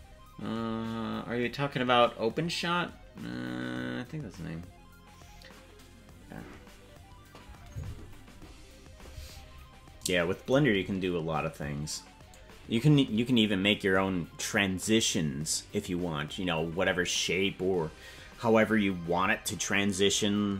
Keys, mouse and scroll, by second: 9.1-10.0 scroll down 9, 10.0 scroll down 2.